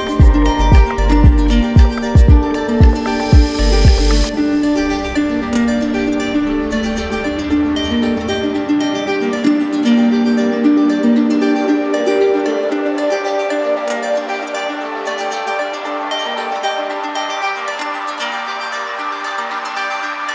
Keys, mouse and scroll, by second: 0.0 click, 2.7-4.4 drag, 4.5-5.5 drag, 6.0-7.2 right drag, 7.5-8.5 drag, 9.9 click, 11.7 click, 14.5 click, 14.9 ctrl+d, 15.7 ctrl+d, 17.6 click, 18.5 click, 19.2 click.